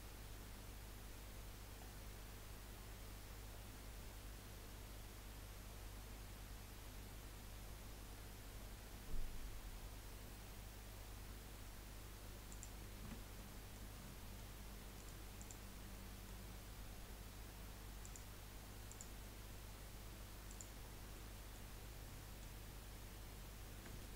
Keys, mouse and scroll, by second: 13.0 Tab, 13.3-15.0 middle drag, 15.0-15.9 right drag, 15.9-18.0 middle drag, 18.0 click, 20.6 click, 21.1-21.7 middle drag, 21.7 scroll down 2, 22.0-23.6 middle drag, 23.6-24.0 scroll down 1, 24.0-24.1 shift+middle drag.